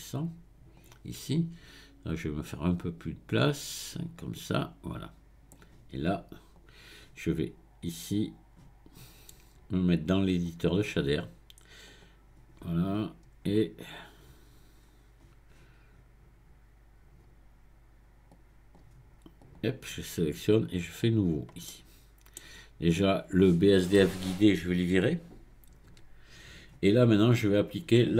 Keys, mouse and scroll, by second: 5.5-8.5 drag, 10.3-13.3 drag, 13.4-14.0 scroll down 1, 14.0 scroll down 4, 14.7 scroll down 2, 15.7-17.9 scroll down 1, 18.3-19.6 drag, 21.0-21.7 drag, 21.7-23.0 middle drag, 23.0 click, 25.9 x, 27.3 click.